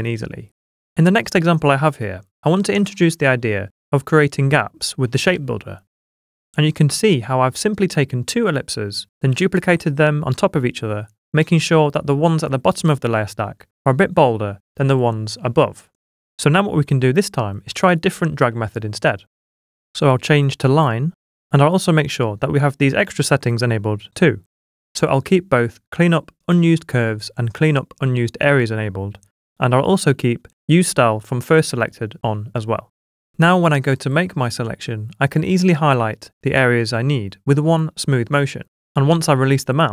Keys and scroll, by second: 6.0 v, 17.7 s, 18.6 super+d.